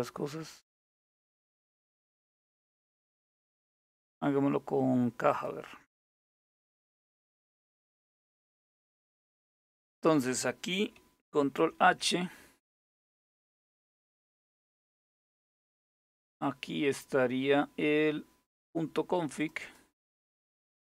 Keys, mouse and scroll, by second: 4.9 click, 8.7 click, 11.2 ctrl+h, 14.1-17.7 scroll up 1, 17.7-19.0 scroll down 1, 19.0 click.